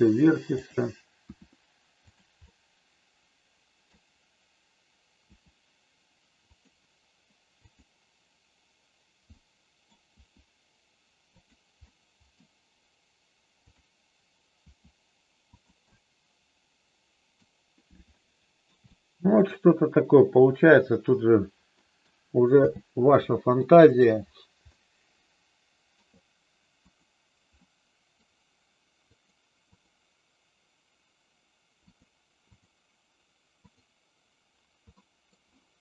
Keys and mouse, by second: 1.3 r, 2.0 click, 2.5-3.8 middle drag, 5.1 r, 7.7 click, 9.3 middle click, 10.1 r, 11.3 click, 11.7 middle click, 13.6 click, 14.6 r, 15.5 click, 15.8-17.3 middle drag, 18.1 middle click, 19.0 shift+middle click, 21.7 middle click, 22.6 n, 23.8 middle click, 24.7-26.0 middle drag, 27.6 middle click, 29.7 click, 31.8 click, 32.5 click, 35.0 middle click.